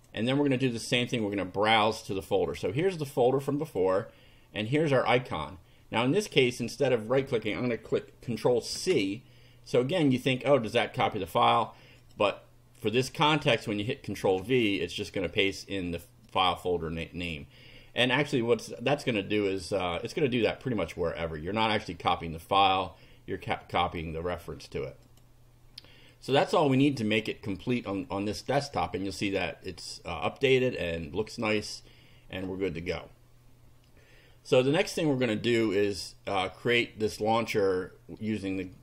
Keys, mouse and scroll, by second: 0.0 click, 1.2 click, 2.5-4.0 drag, 4.6 click, 8.7 ctrl+c, 11.4 click, 12.0 click, 14.2 ctrl+v, 16.3-17.4 drag, 19.2 click, 25.0 click, 26.6 click, 32.5 click.